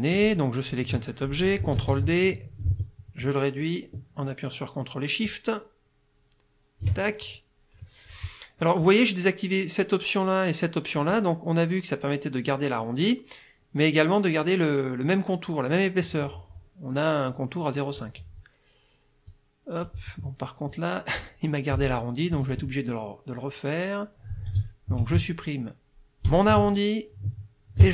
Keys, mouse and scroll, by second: 0.2 click, 1.8 ctrl+d, 2.7-7.0 ctrl+shift+drag, 19.3 click, 20.7 click, 22.5 click, 26.3 shift+click, 27.8 ctrl+shift+click.